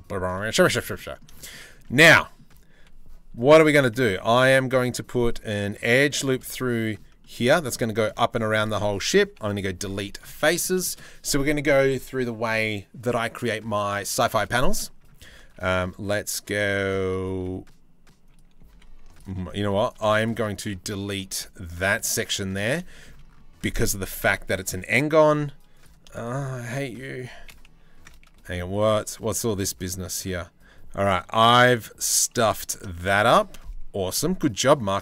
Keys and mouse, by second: 0.0 middle click, 2.4 2, 3.2 3, 5.8 middle click, 6.1 middle click, 6.8 shift+middle click, 7.1 middle click, 7.6 shift+middle click, 7.8 middle click, 8.9 Delete, 10.4 middle click, 14.3 shift+middle click, 15.1 ctrl+r, 16.3 click, 16.9 ctrl+r, 18.3 2, 19.2 3, 19.5 click, 21.0 Delete, 22.5 shift+middle click, 23.2 middle click, 24.1 middle click, 25.4 middle click, 25.7 shift+middle click, 28.0 z, 29.4 a, 32.4 shift+middle click.